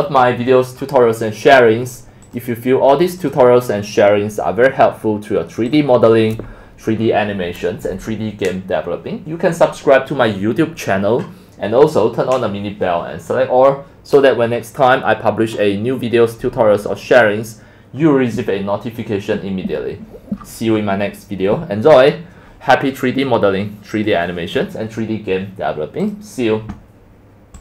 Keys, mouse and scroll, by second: 0.1 scroll down 1, 0.3 middle drag, 0.3 scroll up 10, 0.5-2.2 scroll down 6, 2.2 scroll up 5, 2.4 click, 4.4 click, 6.2-6.6 drag, 7.0 scroll down 5, 16.7 click, 16.8 scroll, 16.9 scroll up 7, 18.9 scroll down 7, 20.4-20.9 scroll up 13, 21.5 scroll down 10, 22.4-22.7 scroll down 6, 23.4 scroll, 24.1-27.6 drag.